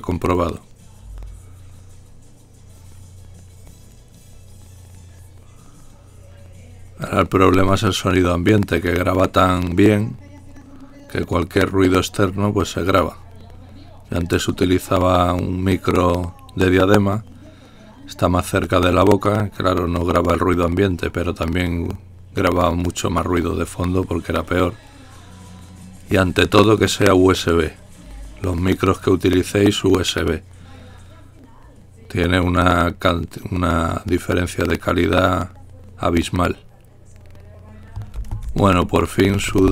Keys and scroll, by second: 34.2-39.7 typing.